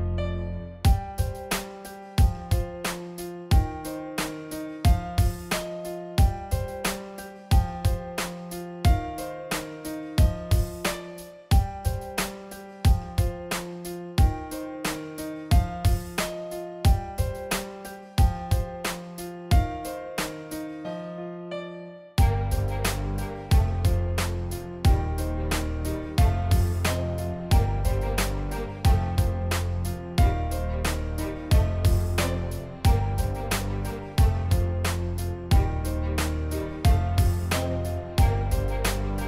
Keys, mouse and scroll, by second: 1.9 click, 2.2 click, 3.2-4.9 drag, 6.7 middle click, 9.1 click, 9.9-11.2 drag, 12.0 click, 13.2 click, 15.0-16.0 drag, 16.7 click, 17.5-18.7 drag, 21.9 click, 22.0 click, 23.4-27.6 drag, 28.0 click, 28.6 click, 28.8 click, 29.3 click, 29.5 click, 31.0 click, 31.4 click, 31.5 click, 32.0 click, 32.3 click, 32.6 click, 32.7 click, 32.9 click, 33.2 click, 33.4 click, 33.8 click, 34.8 click, 34.9 click, 35.6 click, 36.1 click, 36.6 click, 38.0 click, 38.6 click.